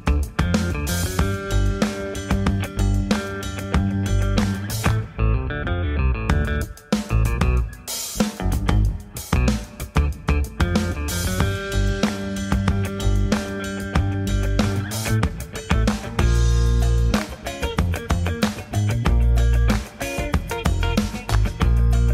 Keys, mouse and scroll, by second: 0.4 s, 0.9 g, 1.3 g, 3.1 g, 6.4 click, 6.5 g, 10.8 shift+middle click, 11.4 click, 11.6 g, 12.9 r, 14.8 click, 14.8 g, 15.0 g, 16.2 g, 17.7 click, 18.1 scroll down 2, 18.4-19.0 scroll up 2, 19.0 scroll up 1, 19.3 shift+middle click, 20.2 click, 20.6 g, 21.1 b.